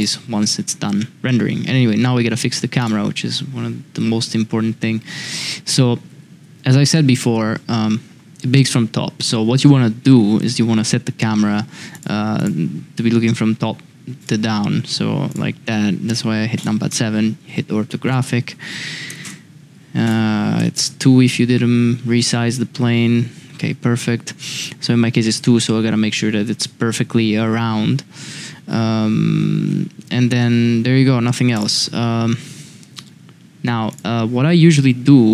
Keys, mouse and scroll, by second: 0.0 click, 5.2 Tab, 6.1 Tab, 15.3-16.6 drag, 18.0-21.3 drag, 31.5 click, 33.9 click.